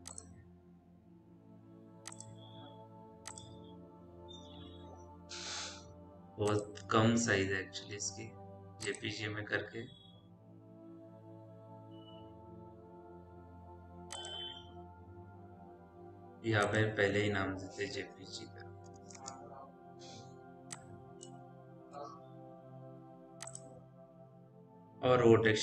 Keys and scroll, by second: 17.5 Caps_Lock, 17.6 j, 18.1 p, 18.8 g, 19.0 space, 22.1 Delete.